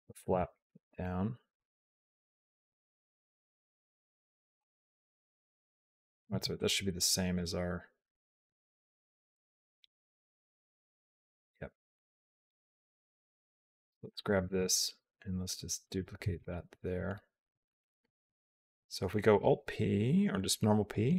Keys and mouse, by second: 1.5-2.5 drag, 4.4 r, 6.3 ctrl+z, 6.4 click, 7.2-12.4 drag, 13.0 a, 13.9 click, 14.4 shift+d, 16.2 click, 17.7-19.2 drag, 20.4 p.